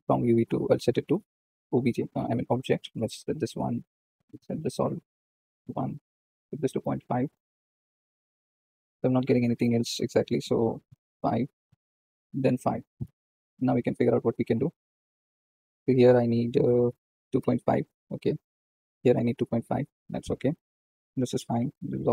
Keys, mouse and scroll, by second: 0.0-0.5 drag, 1.6 shift+middle click, 2.5-3.6 drag, 3.6-5.6 middle drag, 5.6-8.3 drag, 8.3-9.2 scroll up 1, 9.2-11.0 middle drag, 11.0-13.5 drag, 13.5-14.2 middle drag, 14.2 scroll up 1, 17.3-22.1 drag.